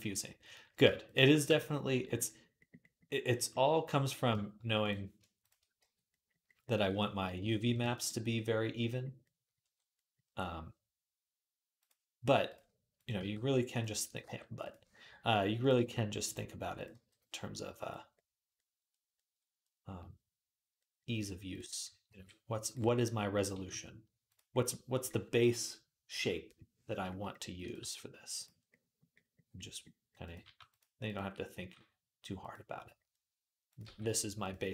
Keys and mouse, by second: 0.3 shift+middle click, 0.8 shift+click, 0.9-4.6 shift+middle drag, 1.3 f, 4.6 click, 5.0 shift+middle click, 5.2 shift+click, 5.3-11.6 shift+middle drag, 5.6 f, 7.5 ctrl+r, 11.6 click, 12.3 middle click, 12.7 click, 12.8-15.4 middle drag, 13.0 g, 14.0 g, 15.4 click, 15.5-23.2 middle drag, 15.6 g, 16.7 g, 21.9 g, 23.2 click, 23.3-29.4 middle drag, 23.3 g, 27.6 g, 30.0 click, 30.2 g, 30.8 click, 31.4 g, 33.6 g.